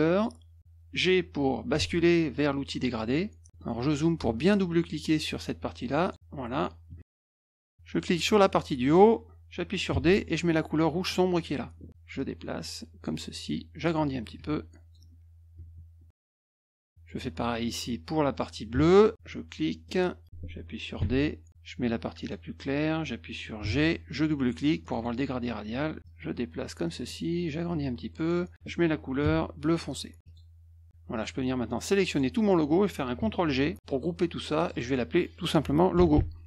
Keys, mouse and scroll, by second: 0.1 click, 1.8 g, 3.5 middle click, 3.6 middle click, 3.9 middle click, 6.0 click, 6.9 -, 7.0 -, 7.5 middle click, 8.8 click, 9.9 d, 11.3 click, 12.1 click, 13.8-14.9 drag, 16.1 click, 18.7 F2, 19.8 click, 21.0 d, 22.2 click, 23.6 g, 24.8 click, 24.9 click, 26.0 click, 27.7 click, 29.2 d, 30.2 click, 30.9 F1, 31.1 click, 31.4-32.1 drag, 33.8 ctrl+g, 34.6 click, 34.7 click, 36.1-36.4 typing.